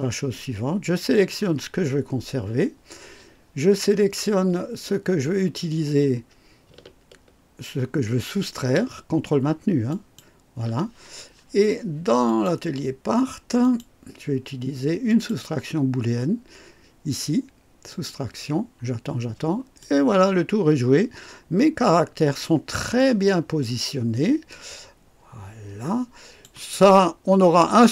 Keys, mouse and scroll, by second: 1.1 click, 9.9 ctrl+click, 12.3 click, 13.6 click, 15.1 click, 17.9 click, 19.8-22.6 drag, 23.0-26.6 drag, 27.0 scroll up 1.